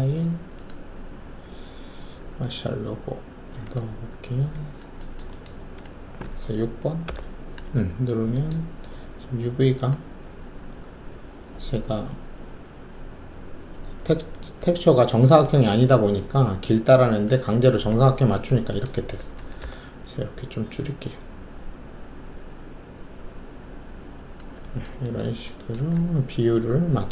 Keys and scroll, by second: 7.0 6, 20.0 alt+r, 25.9 alt+w.